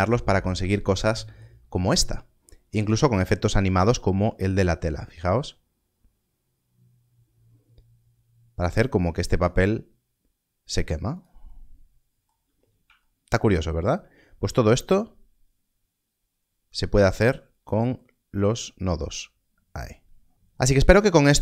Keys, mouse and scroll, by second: 2.6-3.3 scroll down 1, 11.1 click, 12.5 scroll up 1, 13.5-14.0 scroll down 1.